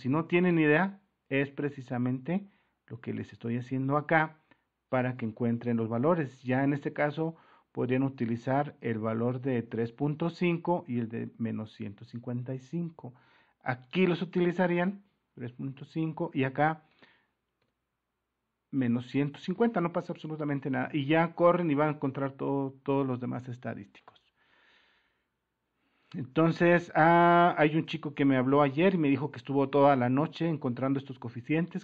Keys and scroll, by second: 4.3 alt+Tab, 12.1 alt+Tab, 14.7-16.2 typing, 17.6 BackSpace, 18.8-20.1 typing, 28.3 super++.